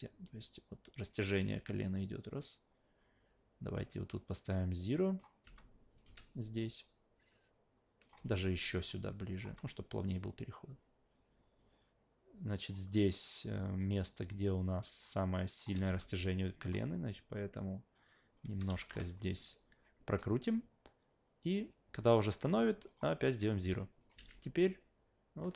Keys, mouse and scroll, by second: 5.4 s, 6.0 a, 7.4 click, 8.2 ctrl+z, 8.9 click, 9.5 s, 9.7-12.7 drag, 13.8 click, 15.8 e, 17.1 click, 18.5 s, 18.7 s, 19.0 alt+middle click, 20.2-22.0 drag, 22.8 click, 24.0 click.